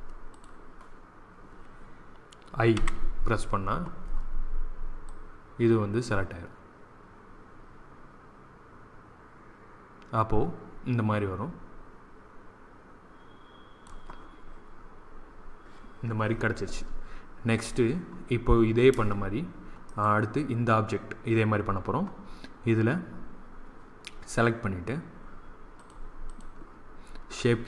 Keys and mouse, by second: 2.7 i, 4.9-6.8 drag, 19.8-21.5 drag, 25.7-27.6 drag.